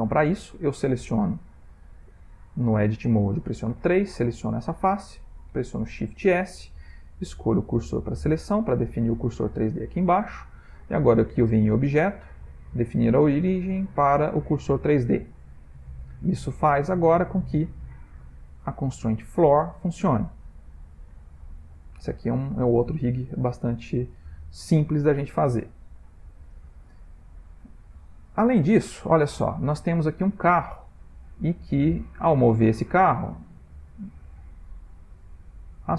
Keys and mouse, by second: 0.2 click, 3.7 3, 4.2 click, 4.6 click, 6.2 shift+s, 8.3 Tab, 11.6 click, 15.4 middle click, 17.0 click, 17.3 g, 23.4 middle click, 23.9 middle click, 24.3 shift+middle click, 25.0 ctrl+middle click, 26.4 shift+middle click, 27.2 middle click, 28.9 shift+middle click, 30.5 middle click, 31.4 click, 32.8 click.